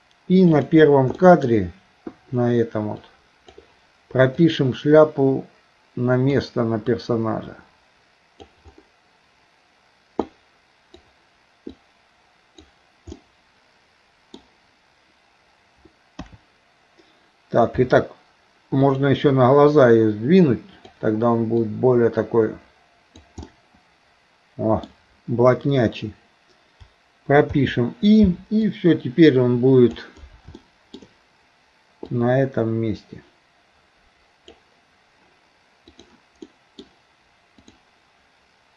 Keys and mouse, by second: 0.6 click, 1.2 shift+middle click, 3.1 click, 4.4-6.4 drag, 7.1-8.5 drag, 10.4 click, 11.7 click, 11.9 click, 13.2-14.4 middle drag, 16.2 KP_3, 17.8 r, 19.7 click, 20.0-21.0 drag, 21.6 click, 22.0-23.3 drag, 23.5-24.9 middle drag, 28.7-30.0 drag, 30.6 shift+middle click, 32.1-34.6 drag, 35.9 click, 36.5 middle click, 37.7-38.7 drag.